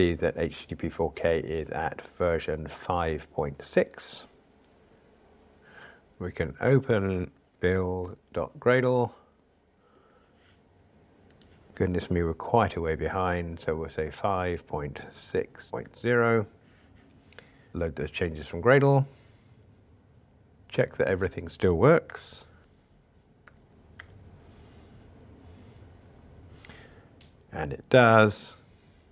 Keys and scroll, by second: 5.9 super+o, 7.3 shift+super+o, 17.7 shift+super+i, 22.1 ctrl+r, 24.0 ctrl+r.